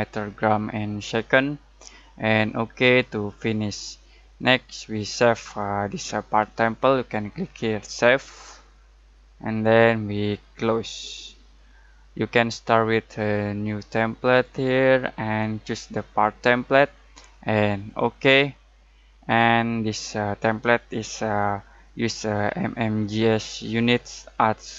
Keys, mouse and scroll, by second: 0.9 click, 2.9-3.5 drag, 8.2 click, 10.8 click, 11.0 click, 14.2 click.